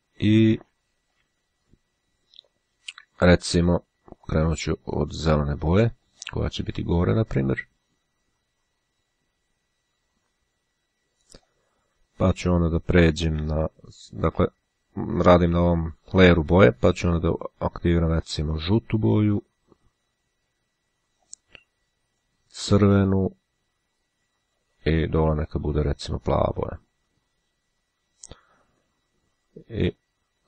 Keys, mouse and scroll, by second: 0.4 [, 1.1 [, 3.6 click, 5.3 click, 6.2 click, 7.1-12.1 drag, 13.6 click, 17.3 click, 18.6 click, 19.4-21.9 drag, 22.3 click, 23.1-25.3 drag, 25.5 click, 26.4-29.0 drag, 29.7 click.